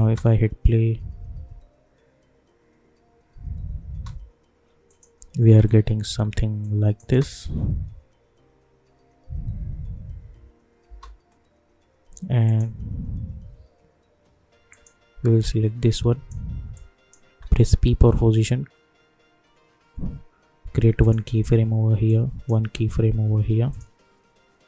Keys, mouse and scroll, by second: 0.0 space, 3.8 space, 4.8 click, 5.5 u, 6.1 u, 6.6 click, 7.0 space, 10.8 space, 12.4 click, 14.7-17.6 drag, 17.6 p, 21.0-24.6 drag.